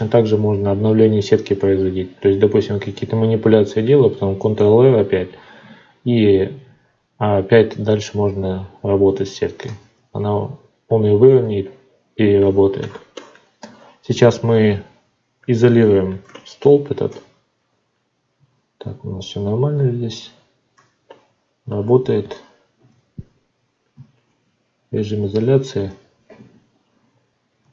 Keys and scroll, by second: 9.6 alt+v, 18.3 ctrl+z, 27.6 F9.